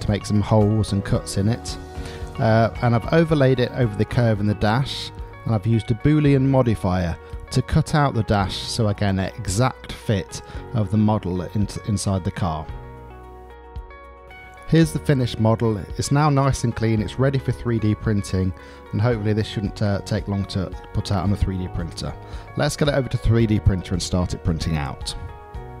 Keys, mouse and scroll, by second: 0.2 click, 0.8-2.2 middle drag, 4.2 middle click, 5.3 click, 6.6 click, 7.1-11.0 middle drag, 11.2-13.0 middle drag, 14.8-15.4 middle drag, 15.8-18.3 middle drag, 18.8-22.4 middle drag, 22.6-25.8 middle drag.